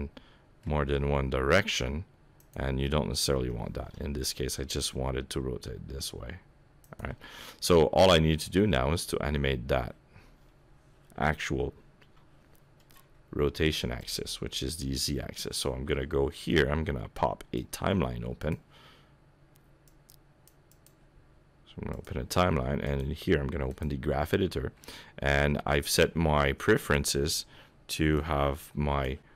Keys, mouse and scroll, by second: 0.9 r, 3.4 KP_7, 4.4 r, 7.2 middle click, 12.1 n, 14.0 click, 17.6 click, 19.9 click, 20.7 click, 22.9 click, 25.9 click.